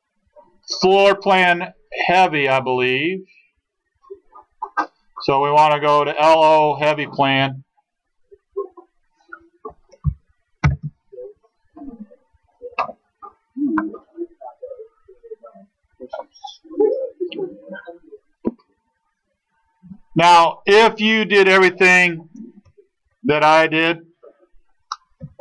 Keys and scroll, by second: 10.7 alt+d.